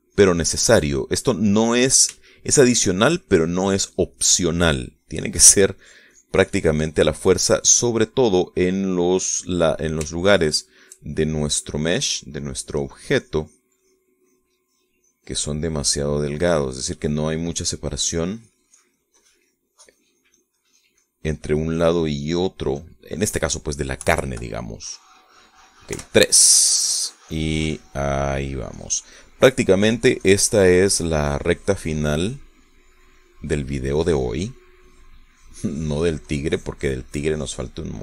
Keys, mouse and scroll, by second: 2.4 middle click, 4.2-6.4 shift+drag, 6.8-9.8 drag, 9.8-11.7 middle drag, 12.2 shift+click, 14.4 click, 15.7-18.0 drag, 18.0 click, 19.2 click, 19.5-24.0 drag, 25.0 KP_Subtract, 25.6 middle click, 27.0 3, 27.4-29.7 drag, 30.6 middle click, 31.2-34.8 drag, 35.0 click, 35.9 click, 36.4-38.0 drag.